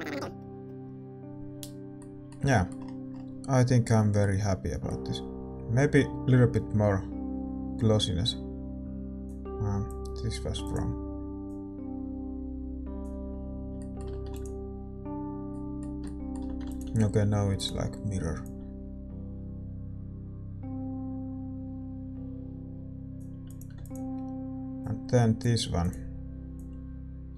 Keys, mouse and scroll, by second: 15.6 click, 15.6-18.9 middle drag, 18.9 ctrl+s, 18.9-27.3 drag.